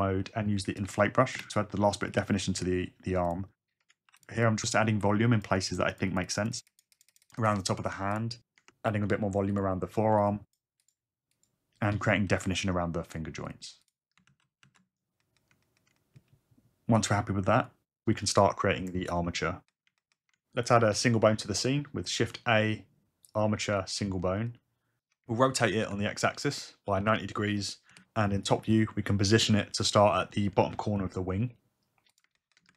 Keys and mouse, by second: 0.8 shift+space, 1.3 shift+space, 4.1 f, 4.2 click, 4.4 click, 5.7 ctrl+click, 6.2 ctrl+click, 6.4 ctrl+click, 6.5 ctrl+click, 6.8 f, 7.0 ctrl+z, 7.1 f, 7.3 f, 7.3 click, 7.5 click, 7.7 click, 8.0 click, 8.0 click, 8.8 f, 8.8 click, 9.1 click, 9.4 click, 9.5 click, 9.5 shift+f, 10.2 ctrl+click, 10.8 ctrl+click, 11.8 f, 12.3 click, 12.6 click, 14.0 f, 14.1 click, 17.6 click, 18.1 click, 21.5 shift+a, 25.5 r, 25.8 x, 27.0 KP_9, 27.1 KP_0, 27.9 KP_Subtract, 29.5 `, 31.0 g.